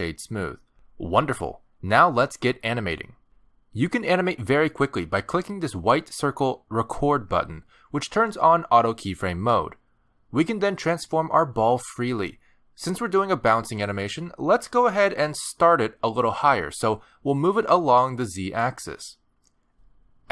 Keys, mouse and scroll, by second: 2.6-3.3 scroll up 4, 3.2 middle click, 4.0-4.4 scroll down 1, 4.5 shift+middle click, 5.5 scroll down 1, 5.6 middle click, 9.7 click, 12.3 middle click, 12.5 g, 14.8 scroll down 2, 15.2 shift+middle click, 15.5 middle click, 16.3 g, 18.4 shift+middle click, 18.7 middle click.